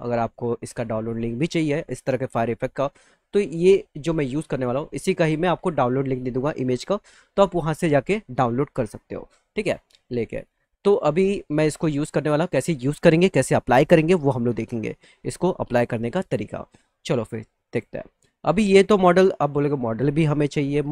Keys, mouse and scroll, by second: 10.3 click, 18.7 click.